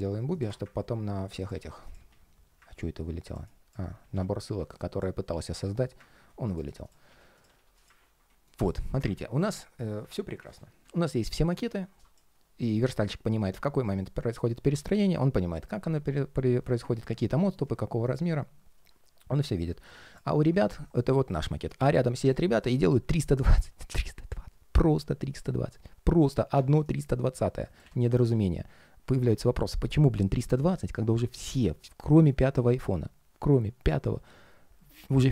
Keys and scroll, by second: 1.4 alt+s, 1.8 alt+s, 3.9 super+z, 5.1 ctrl+shift+3, 5.5 ctrl+shift+3, 6.8 alt+s, 7.3 alt+s.